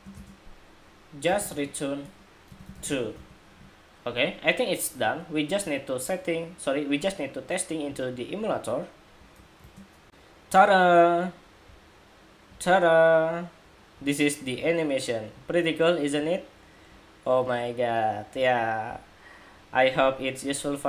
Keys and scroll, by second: 9.8 shift+super+2.